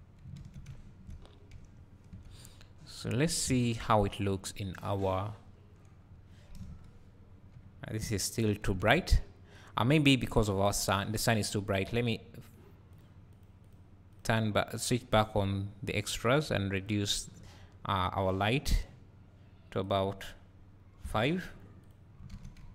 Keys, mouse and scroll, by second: 0.6 `, 1.1 scroll up 1, 1.5 `, 2.7-3.1 scroll down 2, 6.6 KP_0, 7.5 `, 9.5 s, 9.7 scroll down 1, 10.9 click, 11.5 `, 12.9 click, 13.3 click, 13.6-16.9 drag, 21.8 click, 22.6 `.